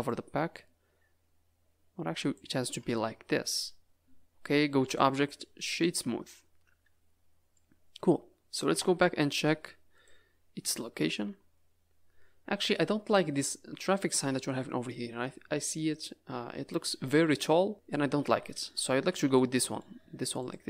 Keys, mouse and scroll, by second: 0.0 click, 2.6 Tab, 2.8 middle click, 3.6-4.6 scroll down 6, 4.8 click, 6.3 middle click, 8.6 KP_0, 9.4 z, 10.4 scroll down 4, 11.2 Tab, 13.0 middle click, 19.0 Tab, 19.3 middle click, 20.0 z.